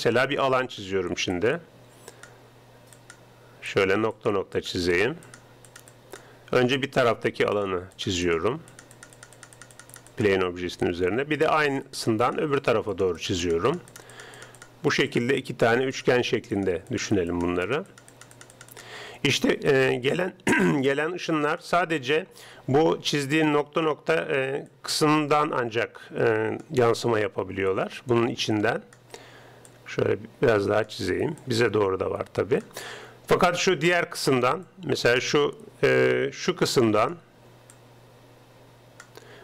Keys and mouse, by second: 0.0-39.4 typing, 1.4-20.5 drag, 20.8-22.5 drag, 24.7 right click, 24.8-26.5 drag, 27.8-29.6 drag, 29.8-33.2 drag, 34.7-36.5 drag, 37.8-39.4 drag.